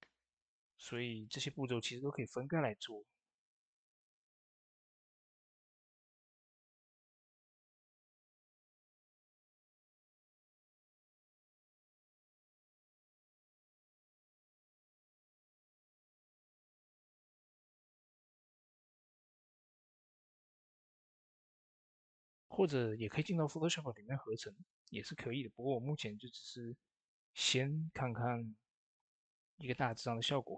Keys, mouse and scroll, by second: 0.6 click, 0.6-1.7 typing, 1.2 click, 9.5 click, 9.5 click, 24.3 click, 24.4 click.